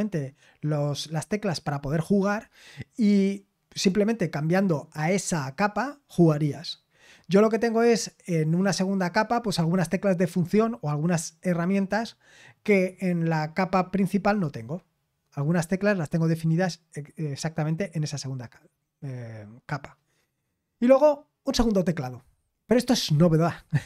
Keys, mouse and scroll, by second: 20.2-23.8 scroll down 1.